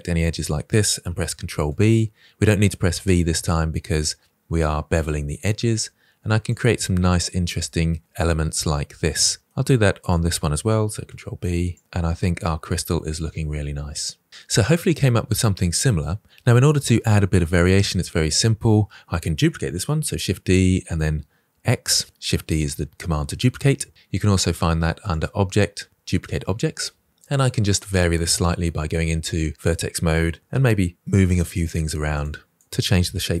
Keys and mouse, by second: 0.5 ctrl+b, 4.9 middle click, 5.4 Tab, 6.1-8.4 middle drag, 9.2 Tab, 9.5 click, 10.7 ctrl+b, 11.2 click, 11.3 Tab, 11.4-13.4 drag, 13.7-14.0 drag, 14.3 click, 14.3 KP_1, 20.0 shift+d, 20.8 x, 28.7 Tab, 28.7 1, 29.8-33.4 typing, 30.3 click, 30.9 click, 31.6 click, 32.1 middle click.